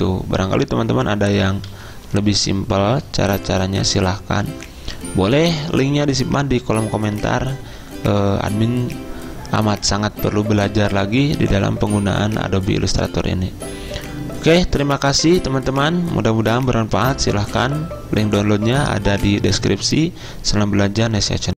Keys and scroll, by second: 1.7 z.